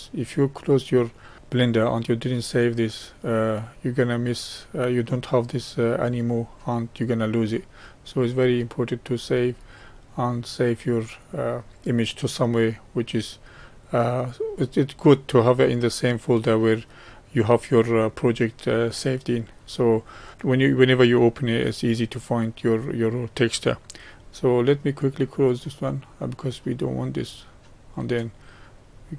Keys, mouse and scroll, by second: 6.5-8.7 middle drag, 8.7-11.9 drag, 16.1-19.1 drag.